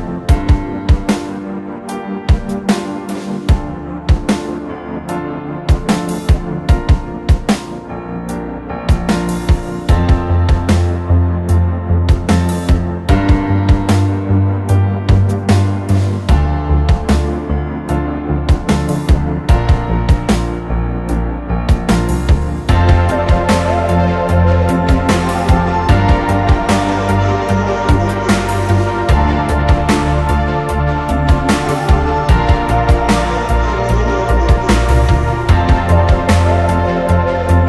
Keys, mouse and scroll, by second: 1.8 Delete, 3.1 r, 4.2-4.5 typing, 5.9 space, 9.3 Delete, 11.2 a, 13.0-13.9 scroll down 1, 13.5 Escape, 13.9-16.8 typing, 14.6 Escape, 17.2-17.6 scroll down 4, 18.1 typing, 19.2-20.7 typing, 22.1 space, 23.6-26.3 typing, 27.7 middle click, 28.0 middle click, 28.5 r, 28.5-29.1 scroll up 1, 29.1 scroll down 1, 29.4 middle click, 29.7-30.8 scroll up 1, 30.8 Escape, 31.5 scroll down 1, 31.6 scroll up 1, 32.4 space, 35.1-35.6 scroll down 1, 35.1 m, 35.6-36.1 scroll down 1, 36.5-36.8 scroll up 1, 36.8 click, 37.0 middle click, 37.3-37.6 typing.